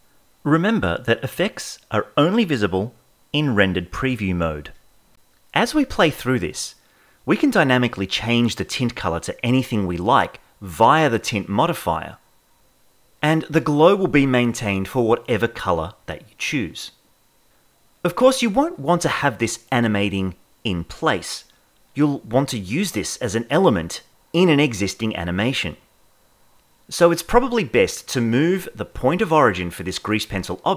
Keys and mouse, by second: 0.0 click, 2.6 click, 4.5 space, 5.5-6.9 shift+middle drag, 9.0 click, 25.0 space, 26.6 KP_0.